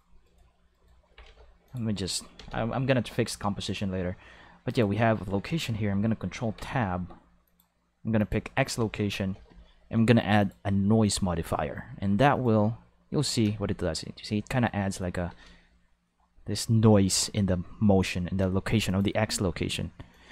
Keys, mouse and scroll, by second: 0.2 right click, 0.7 right click, 1.1 g, 1.3 z, 1.7 click, 1.9 right click, 2.4 ctrl+s, 3.6 click, 4.7 click, 6.4 ctrl+Tab, 7.5 click, 8.2 click, 9.3 n, 10.4 click, 11.0 click, 12.3 click, 13.4 space, 15.3 space, 18.9 click, 20.1-20.3 drag.